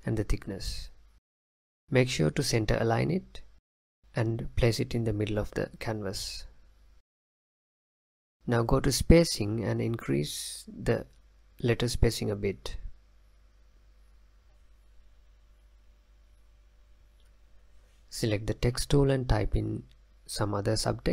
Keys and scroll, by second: 19.4-21.1 typing.